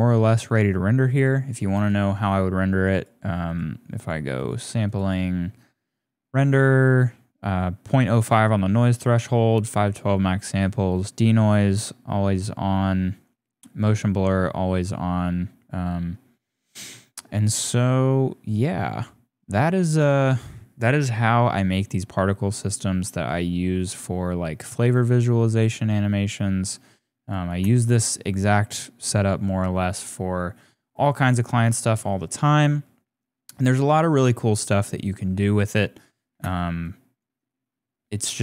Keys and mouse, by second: 1.5 click, 1.8 click, 3.0 click, 3.4 click, 4.0 click, 4.4 click, 4.9 click, 10.9 click, 16.9-20.0 drag, 24.4-27.3 drag, 27.4 space, 36.3 space, 36.8 click.